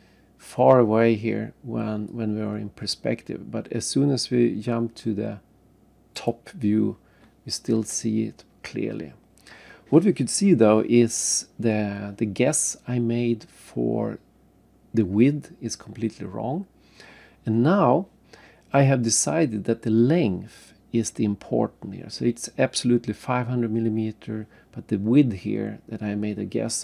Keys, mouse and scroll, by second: 0.6 scroll up 1, 0.8 scroll down 1, 0.9-2.1 scroll down 1, 2.1 click, 3.2-3.6 scroll up 1, 3.7-4.9 scroll down 3, 6.1 click, 8.2 scroll up 1, 9.0-9.4 scroll down 1.